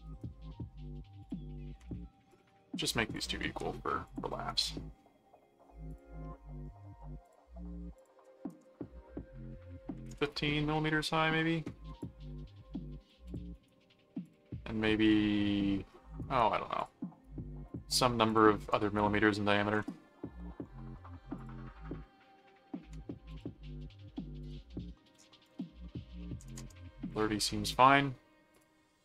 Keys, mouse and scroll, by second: 0.0 right click, 1.2 click, 2.3 ctrl+click, 3.1 ctrl+alt+click, 3.4 ctrl+alt+q, 4.1 click, 4.3 right click, 5.9 click, 7.2 click, 7.9 click, 12.0 click, 13.2 click, 13.5 right click, 14.2 click, 16.2 right click, 16.8 click, 17.7 click, 18.6 click, 21.4 click, 23.3 click, 24.4 click, 25.0 click, 28.5 click.